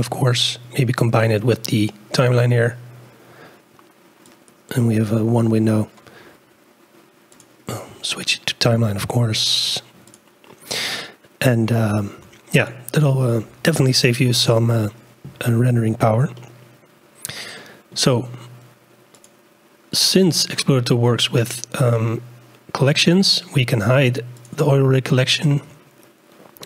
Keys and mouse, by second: 4.3 click, 7.3-10.3 drag, 11.7 click, 15.5 shift+click, 16.3-17.9 drag, 19.1 click, 24.4 click.